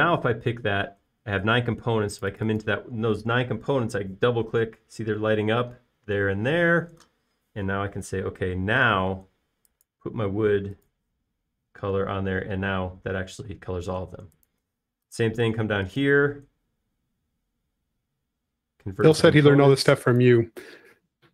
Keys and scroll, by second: 9.4 b, 15.3 space.